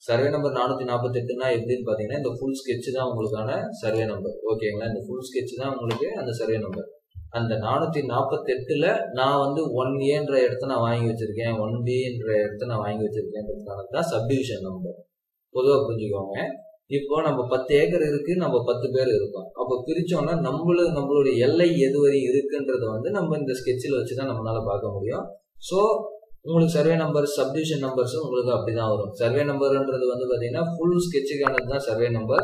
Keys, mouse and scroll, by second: 1.6-3.2 scroll down 1, 6.4 Escape.